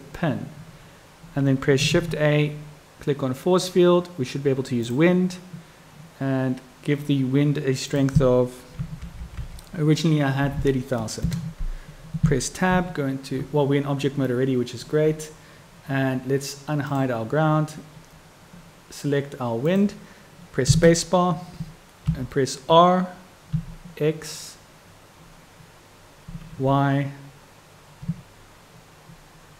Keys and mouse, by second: 1.9 shift+a, 7.9-12.0 drag, 12.7 Tab, 14.3-14.8 drag, 19.6 click, 20.7 space, 22.2 r.